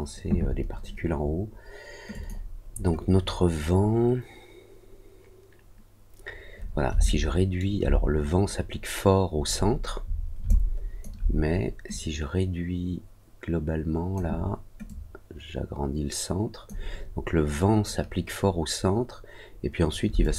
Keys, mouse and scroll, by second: 2.0 click, 7.0 alt+middle click, 9.4 scroll up 1, 9.8-10.2 scroll down 2, 10.4 alt+click, 11.8-14.1 drag, 14.8-16.6 drag, 20.1 alt+click.